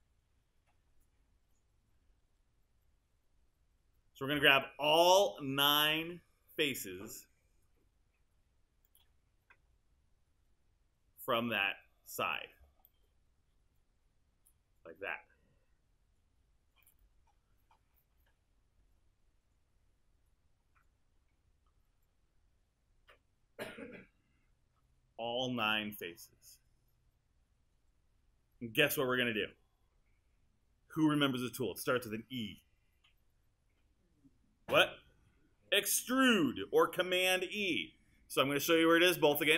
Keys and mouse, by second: 5.4 alt+click, 14.4 alt+click, 16.9 alt+click.